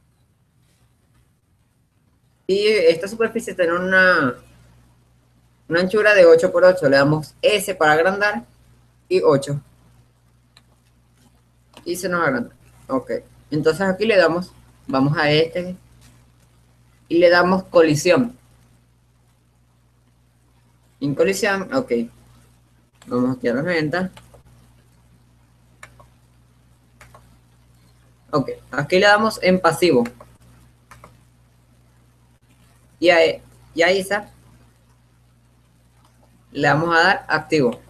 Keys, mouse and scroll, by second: 0.4 shift+a, 3.4-6.9 middle drag, 7.7 s, 11.7 middle click, 12.5-14.0 middle drag, 15.5-17.1 drag, 18.7-20.0 drag, 23.7-28.9 drag, 29.3-30.4 middle drag, 30.4-32.9 drag, 32.9-36.8 middle drag, 36.8-37.8 right drag.